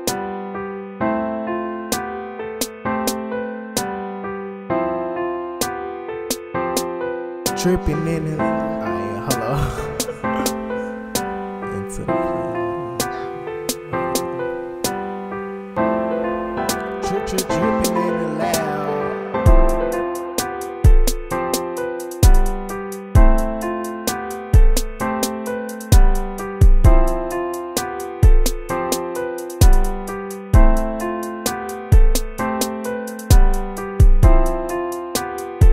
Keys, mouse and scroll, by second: 15.2 ctrl+-, 16.0 ctrl++, 26.3 ctrl+z.